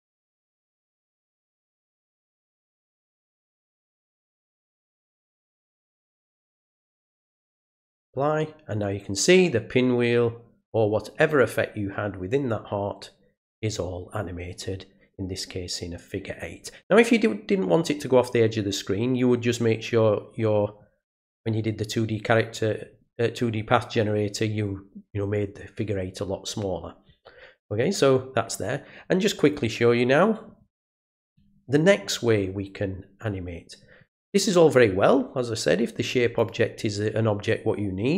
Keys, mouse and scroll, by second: 1.3 click, 3.3 click, 4.1 click, 5.3 click, 7.2 click, 29.4 right click, 30.8 click, 36.4 click.